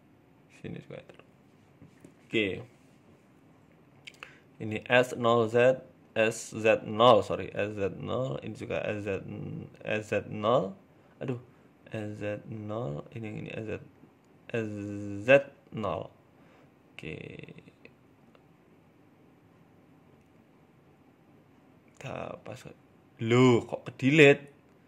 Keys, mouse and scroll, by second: 1.7 KP_3, 2.2 shift+middle click, 2.5-3.1 scroll down 1, 3.1 right click, 3.5 alt+shift+right click, 4.1 s, 5.3 right click, 5.4 alt+shift+Right, 5.9 s, 7.5 alt+shift+Right, 7.9 s, 8.7 right click, 9.0 alt+shift+Right, 9.4 s, 10.3 ctrl+z, 10.8 s, 12.1 right click, 12.3 alt+shift+right click, 12.8 s, 13.4 ctrl+z, 13.9 right click, 14.3 right click, 14.6 alt+shift+right click, 14.8 alt+shift+right click, 15.1 s, 16.2-16.6 scroll up 2, 17.9 right click, 18.3 alt+shift+right click, 19.3 g, 21.4 middle click, 22.3 middle click, 24.0 shift+middle click, 24.3 middle click.